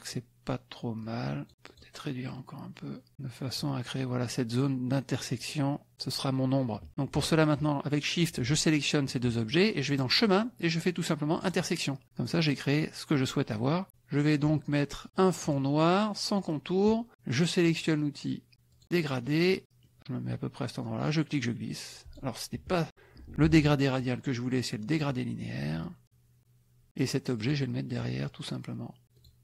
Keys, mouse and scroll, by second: 1.0 click, 1.8 click, 2.3-3.7 drag, 8.2 shift+click, 9.9 click, 11.6 click, 15.4 click, 16.4 middle click, 18.7 click, 19.1 middle click, 19.9 middle click, 21.1-22.3 drag, 23.4 ctrl+z, 24.9 click, 25.8-26.9 drag, 27.4 click, 29.1 click.